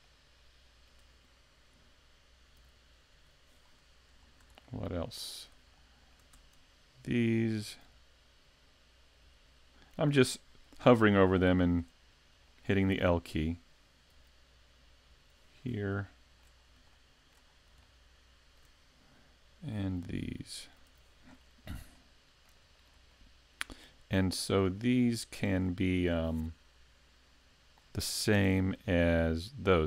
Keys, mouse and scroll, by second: 0.1 shift+middle click, 2.6 l, 3.1 l, 3.6-4.2 scroll down 2, 4.2-4.6 scroll down 1, 4.6 shift+middle click, 5.3-5.7 scroll up 1, 5.7 shift+middle click, 7.8 l, 9.3 l, 10.9 shift+middle click, 11.5-12.0 scroll up 1, 12.0-12.4 scroll up 2, 12.5 shift+middle click, 14.1 l, 15.1 l, 16.0 shift+middle click, 16.0 shift+scroll up 1, 16.6-17.0 scroll up 2, 16.9 shift+middle click, 17.5-17.8 scroll up 1, 17.8 shift+middle click, 19.8 l, 20.9 l, 21.3-21.8 scroll down 4, 21.9 shift+middle click, 22.6-23.1 scroll down 3, 23.1 shift+middle click, 24.3 scroll down 1, 24.8 shift+middle click, 28.3 Tab.